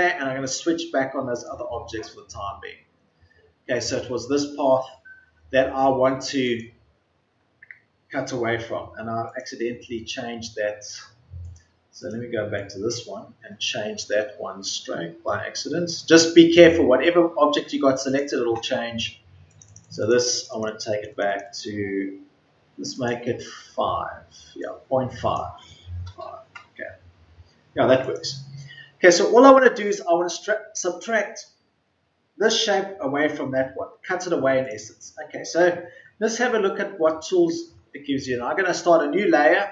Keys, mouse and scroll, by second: 25.9 KP_5.